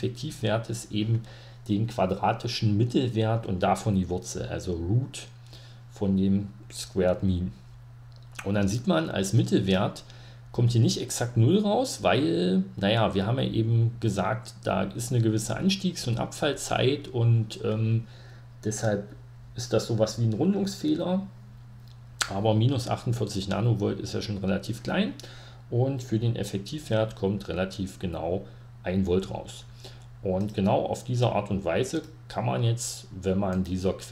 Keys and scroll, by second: 26.5 ctrl+Page_Down.